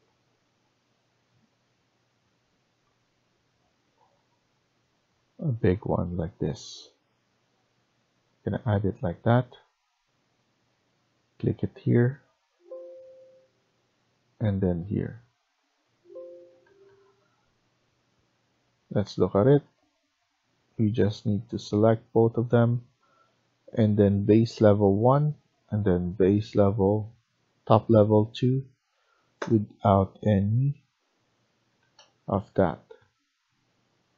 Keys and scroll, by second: 16.2 Escape, 16.6 Escape, 16.8 Escape, 29.2 0, 31.5 Escape, 31.7 Escape.